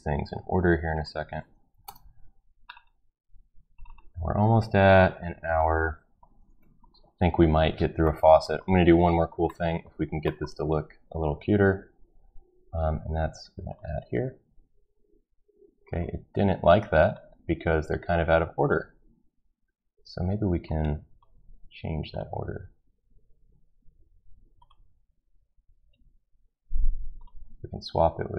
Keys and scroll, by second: 1.6-2.3 typing, 3.5-4.4 typing.